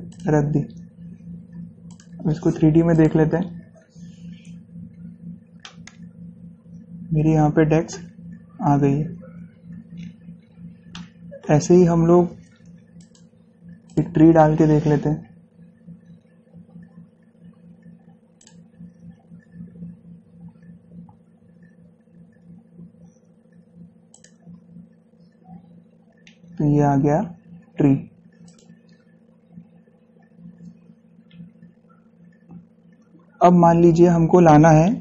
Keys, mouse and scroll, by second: 0.3 click, 4.6 scroll up 1, 5.8-8.7 shift+middle drag, 8.7 scroll up 1, 9.7 scroll down 1, 11.1-13.2 shift+middle drag, 13.2 click, 14.2 click, 15.1 scroll down 1, 18.6 click, 18.7 click, 24.3 click, 25.9-26.3 scroll down 1, 27.2 scroll, 28.6 click, 29.6 scroll down 1, 30.2 scroll up 1.